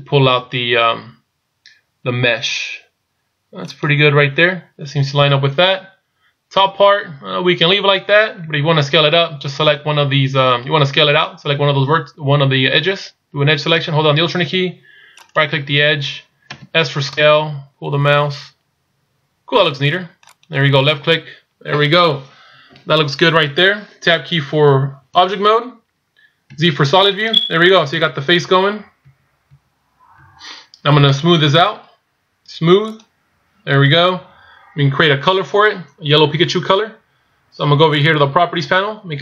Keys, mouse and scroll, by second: 8.5 a, 15.3 alt+right click, 16.6 s, 25.4 Tab, 26.6 z, 30.3 z, 32.9 click, 38.0 click.